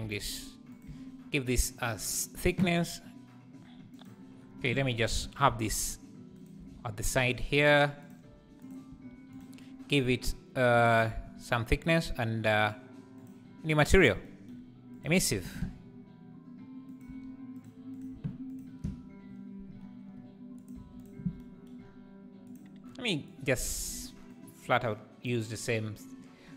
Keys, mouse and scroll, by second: 0.0 g, 0.8 Tab, 6.3 shift+right click, 6.5 shift+s, 7.3 s, 8.2 g, 9.9 s, 10.9-15.0 shift+drag, 15.1 x, 15.4 shift+a, 18.5 ctrl+shift+click, 21.0 click.